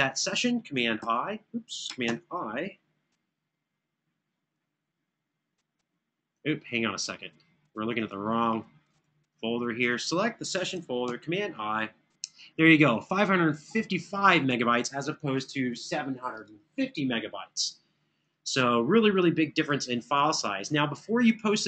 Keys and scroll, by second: 0.7 super+o, 1.8 super+i, 10.8 super+i.